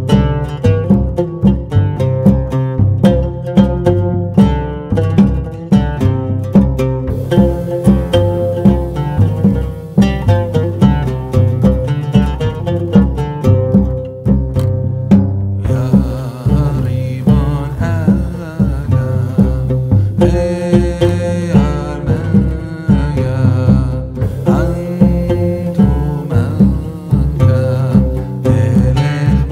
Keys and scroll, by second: 0.9 ctrl+a, 2.6 ctrl+a, 3.3 KP_1, 3.5 KP_1, 5.3 s, 7.2 g, 15.1 Tab, 15.9 f, 20.8 KP_1, 21.5 g, 24.2 shift+a, 24.9 s, 26.1 KP_0, 26.4 n.